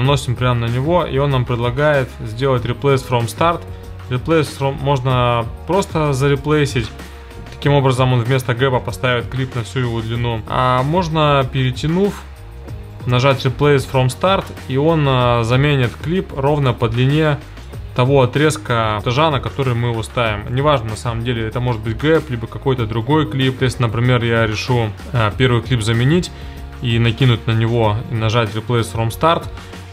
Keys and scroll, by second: 10.4 super+z.